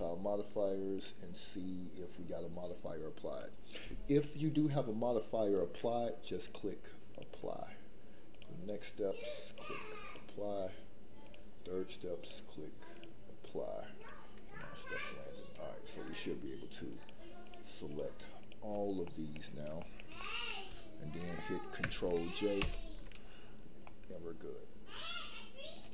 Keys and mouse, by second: 6.4-7.2 drag, 8.3 click, 9.4-10.1 drag, 11.2 click, 12.2-13.0 drag, 14.8 click, 17.4 shift+click, 18.4 shift+click, 19.0 middle click, 19.8 shift+middle click, 20.2 middle click, 22.6 ctrl+j, 23.8-25.8 middle drag.